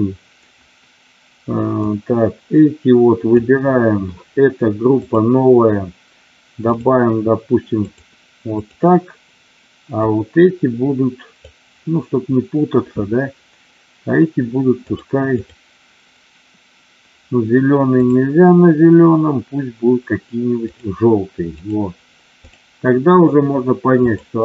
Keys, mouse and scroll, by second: 1.7-3.4 drag, 4.9 click, 6.7-8.0 drag, 10.0-11.5 drag, 18.0-20.7 drag, 21.6 click, 22.5 click.